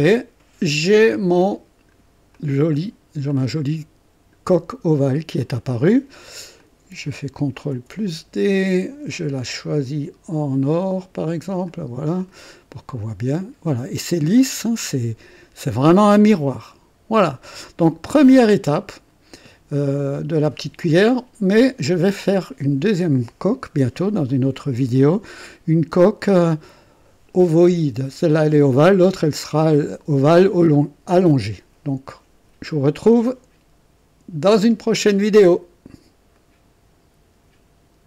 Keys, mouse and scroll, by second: 0.1-2.1 drag, 2.4 click, 3.3-4.6 drag, 5.0 scroll down 2, 5.4 click, 6.6 click, 7.7 ctrl+d, 9.4 click, 11.6 click, 12.2 click, 12.9-15.9 drag, 16.2-17.7 drag, 18.7-19.5 drag, 20.8-21.6 drag, 25.9-26.5 drag, 34.5 click, 36.3 right click.